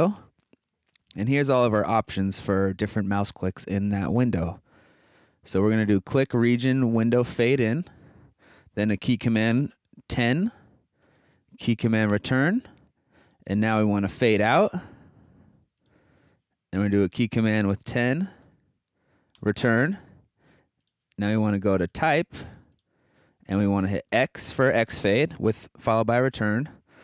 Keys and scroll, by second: 0.0-0.6 typing, 10.0 0, 12.1 Return, 17.9 0, 19.3 Return, 24.1 x, 25.5 Return.